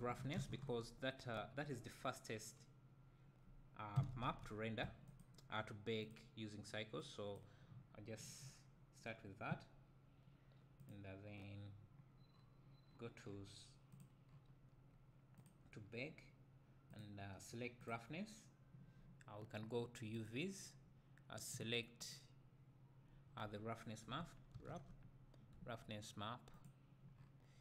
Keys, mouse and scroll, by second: 5.1-7.0 drag, 5.1 s, 17.9-20.4 drag, 22.2-27.6 drag.